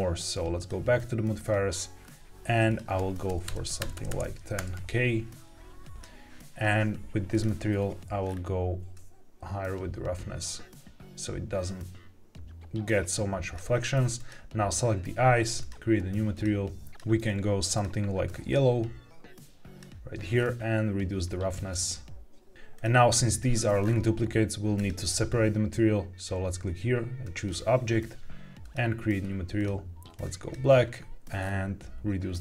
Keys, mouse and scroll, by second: 0.5 click, 1.9-2.6 scroll down 1, 2.6-5.0 drag, 3.7 KP_0, 4.0 KP_0, 5.9 click, 5.9 scroll down 1, 6.8 scroll down 1, 7.2 click, 8.2-8.8 scroll down 2, 8.8-13.5 drag, 14.1 click, 15.5 click, 16.2 click, 16.9 ctrl+z, 16.9 click, 17.7 click, 20.3-20.6 scroll down 1, 21.6 click, 22.7 click, 23.7-24.7 scroll up 2, 24.7-27.3 drag, 28.5 click, 29.5 click, 31.3-32.4 scroll down 2.